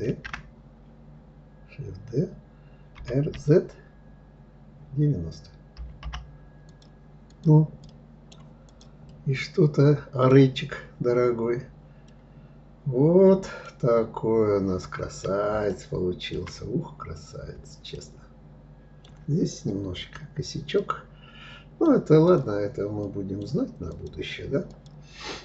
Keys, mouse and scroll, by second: 6.9 click, 7.5 right click, 8.3 click, 8.7-10.2 middle drag, 10.2 scroll down 2, 11.7-13.3 middle drag, 13.3-13.8 scroll down 1, 13.8-14.5 scroll up 2, 14.5-15.2 scroll up 1, 15.2 scroll up 1, 15.3-16.3 shift+middle drag, 16.3-17.6 scroll up 2, 17.6-19.7 shift+middle drag, 19.7 click, 20.4-21.9 middle drag, 21.9 click, 22.7-23.6 middle drag, 23.6 click, 24.3 click.